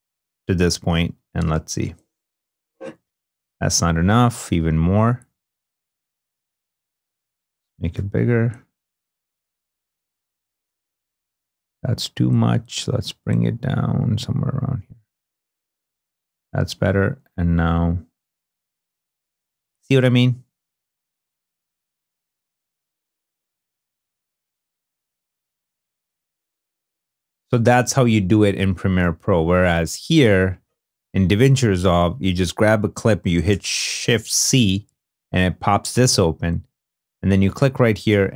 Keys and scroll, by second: 1.6 space, 7.6 =, 8.7 -, 10.2 space, 15.0 space, 20.4 super+z, 22.6 space, 26.0 space, 28.2 super+Tab, 33.4 shift+c.